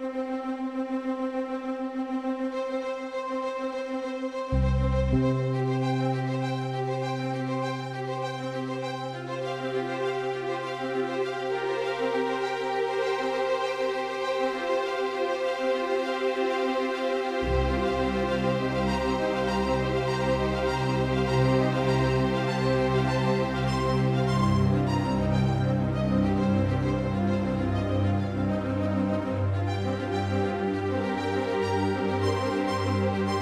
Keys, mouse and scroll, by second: 0.7-3.2 right drag, 2.8-4.9 drag, 4.0-9.2 right drag, 8.2 c.